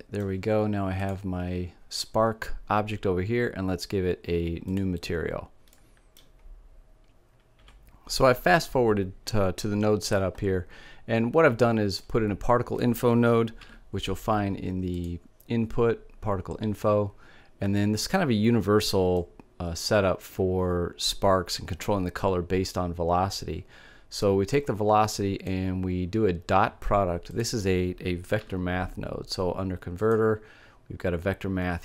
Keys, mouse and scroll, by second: 1.1-2.5 drag, 4.4-6.2 drag, 6.2 middle click, 8.8 middle click, 10.5 middle click, 11.4 click, 13.1 shift+a, 18.6-20.4 drag, 24.0-25.6 drag, 26.7-28.7 drag, 27.8 shift+a.